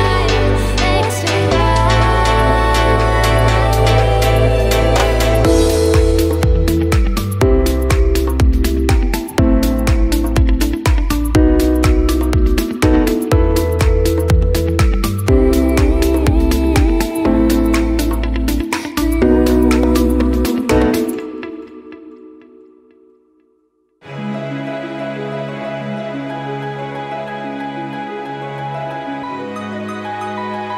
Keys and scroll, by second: 6.5 BackSpace, 8.3 space, 10.8 space, 14.9 Up, 15.1 Up, 15.3 Up, 15.6 Up, 16.3 Up, 16.5 Up, 16.9 Up, 20.9 Up, 21.3 Up, 21.4 Up, 21.6 Up, 21.8 Up, 22.0 Up.